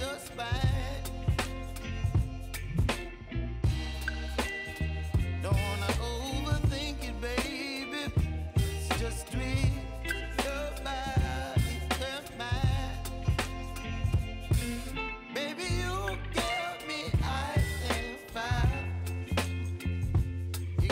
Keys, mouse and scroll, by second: 2.9 click, 5.5 click, 8.0 ctrl+z, 9.0-20.9 drag.